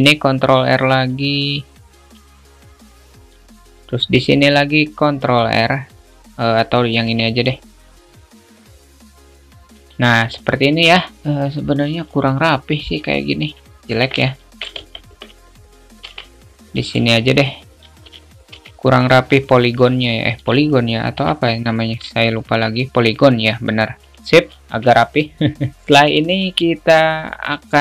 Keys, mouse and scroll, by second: 1.7 click, 2.4 g, 6.2 click, 8.8-10.1 drag, 10.8 shift+middle click, 13.0 a, 14.6 alt+shift+middle click, 15.3 ctrl+z, 16.2 ctrl+r, 17.9 click, 18.8 g, 20.6 click, 24.5 a, 24.7 alt+shift+middle click.